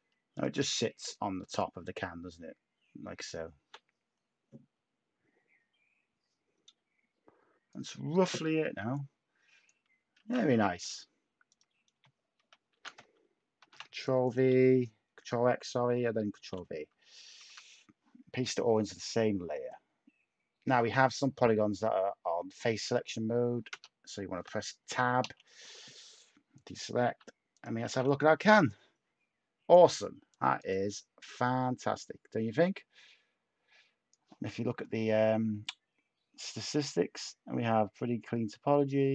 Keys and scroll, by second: 10.1 a, 12.7 a, 13.5 ctrl+x, 16.3 ctrl+v, 17.3 a, 22.7 a, 23.7 Tab, 25.2 /, 27.0-27.8 typing.